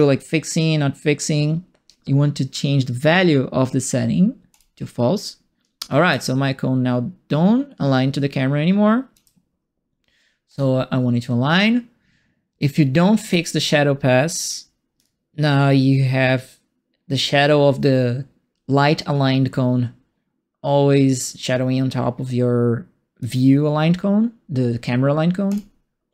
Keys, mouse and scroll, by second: 4.5 click, 6.1-9.1 alt+drag, 10.4 click, 13.2 click, 15.0-23.2 alt+drag, 25.4 click.